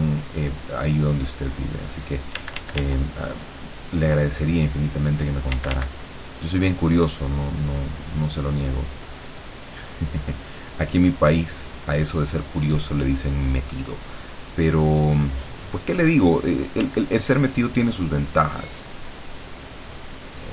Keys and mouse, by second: 2.5 d, 3.5-5.3 drag, 5.6 d, 5.9-8.7 drag, 9.0-12.5 drag, 12.8-14.5 drag, 15.3-16.9 drag, 16.9 d, 17.1-20.5 drag.